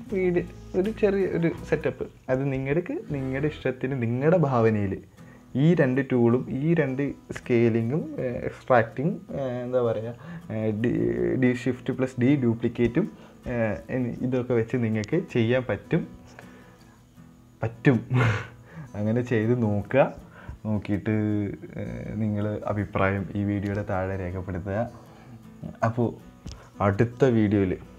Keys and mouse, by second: 0.5-1.2 middle drag, 1.4-1.8 middle drag.